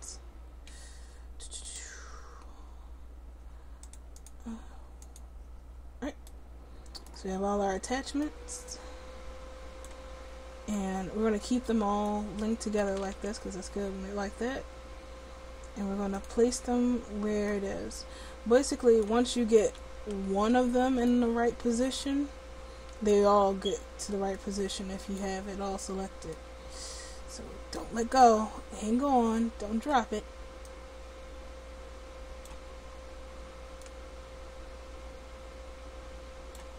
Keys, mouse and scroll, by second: 6.3 middle click, 6.3 right click, 12.8 r, 16.4-18.6 drag, 23.1-28.3 drag, 30.7-32.6 drag, 33.9-36.7 drag.